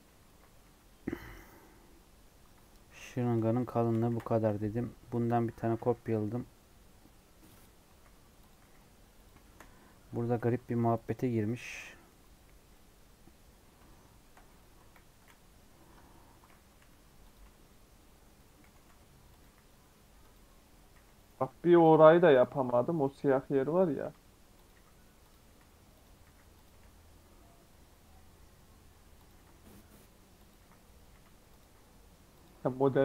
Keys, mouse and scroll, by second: 3.3 shift+middle click, 3.9 scroll up 1, 4.0 shift+d, 5.9 e, 9.4 shift+middle click, 9.6-10.2 scroll up 4, 10.2 g, 13.5 scroll up 1, 13.8 middle click, 14.7 KP_1, 15.9 KP_3, 16.3 scroll up 1, 16.7 s, 17.3 g, 18.6 g, 19.4 e, 20.9 e, 21.3 s, 21.9 e, 23.5 e, 23.9 s, 24.7 e, 26.6 s, 29.3 e, 30.5 e, 31.0 s, 31.6 e, 32.8 e.